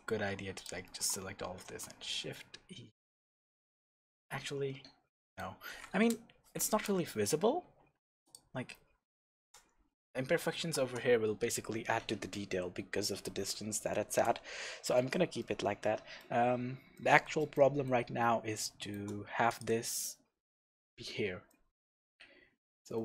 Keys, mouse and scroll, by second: 0.5 alt+shift+click, 1.6 shift+e, 4.2 Escape, 4.4 Tab, 4.7-5.1 scroll down 2, 5.1 scroll up 2, 5.1-8.2 middle drag, 5.4-6.0 scroll down 2, 6.0 KP_0, 6.8-7.4 scroll up 2, 7.4 Tab, 8.2 click, 9.3 shift+z, 14.4-14.9 scroll down 1, 14.9 alt+a, 15.4-19.4 middle drag, 16.4-16.9 scroll up 1, 19.4 click, 21.4-23.0 shift+middle drag.